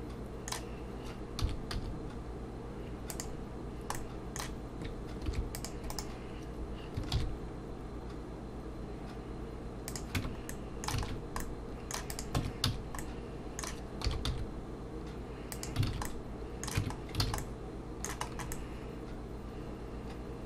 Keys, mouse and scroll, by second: 1.4 s, 3.9 middle click, 5.3 ctrl+r, 7.1 ctrl+b, 10.2 Tab, 10.5 middle click, 11.0 alt+a, 11.1 scroll down 1, 11.4 middle click, 12.1 click, 12.4 Tab, 12.7 a, 13.0 middle click, 14.0 s, 15.9 alt+a, 16.8 Tab, 16.8 middle click, 16.9 scroll down 2, 17.2 alt+a, 17.4 middle click, 18.3-19.1 scroll up 3, 18.5 middle click.